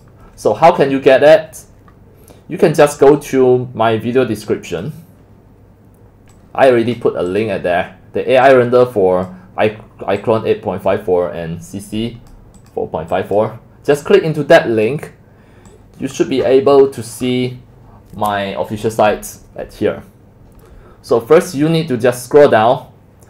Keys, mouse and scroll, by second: 3.3 click, 4.0 click, 4.3 click, 4.8-6.4 drag, 7.4 click, 9.3 click, 12.7 click, 13.5 click, 14.9-15.9 drag, 16.3-16.8 scroll down 9, 16.8-17.2 scroll up 17, 17.2-19.5 scroll down 7, 19.5-21.2 scroll down 10, 21.2 scroll up 5, 21.4 middle drag, 21.4-22.3 scroll down 9, 22.0 middle drag, 22.3 scroll.